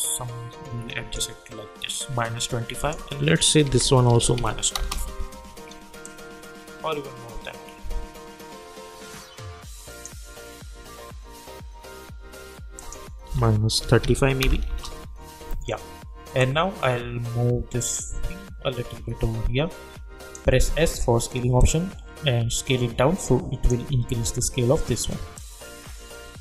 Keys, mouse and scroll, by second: 3.6 -, 4.7 Return, 6.0-12.3 drag, 12.7 click, 13.2 -, 14.6 Return, 16.4-20.5 drag, 20.6 s, 21.6-26.4 drag.